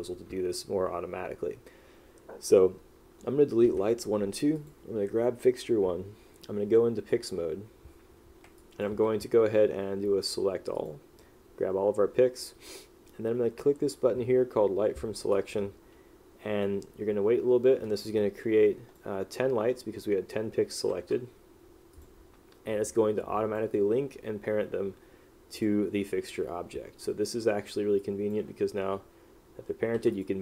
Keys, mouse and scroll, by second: 8.7 click, 18.2 click, 21.2 q, 23.0 click, 27.2 click, 28.1 click, 30.1 w, 30.3 click.